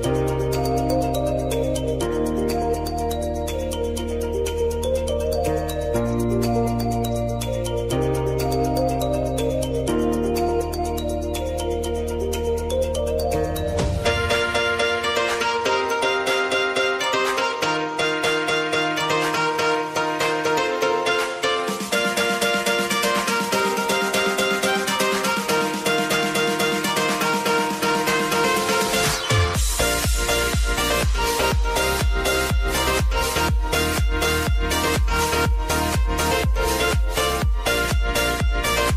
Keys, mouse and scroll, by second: 0.1 click, 3.3 click, 5.2 Return, 21.3 ctrl+alt+Home, 22.8 click, 24.7 s, 25.4-26.8 drag, 27.4 Return, 28.2 click, 29.1 p, 29.5 click, 30.4 t, 30.8 click, 32.4 u, 33.0 click, 33.6-34.4 typing, 36.2 click.